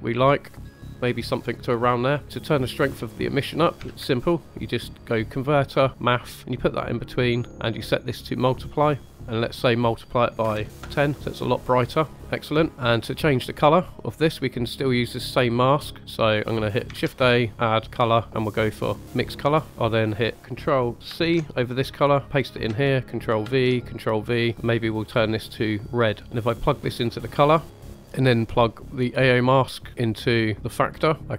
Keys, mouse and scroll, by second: 0.8 click, 1.0 middle click, 1.8 scroll down 1, 2.2-3.5 drag, 3.8 shift+a, 7.9-9.1 drag, 9.7-10.8 drag, 12.7 middle drag, 14.3 middle click, 15.6 middle click, 16.9 shift+a, 17.7 shift+a, 19.7 middle click, 19.7 scroll up 2, 21.0 ctrl+c, 22.6 ctrl+v, 23.4 ctrl+v, 24.1 click, 26.3-27.6 drag, 27.6 g, 31.2 click, 31.2 middle click.